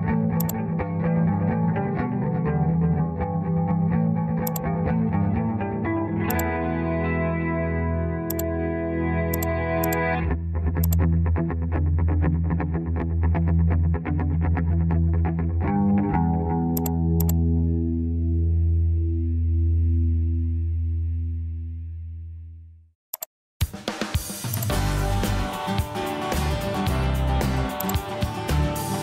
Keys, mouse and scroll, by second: 2.5 Return.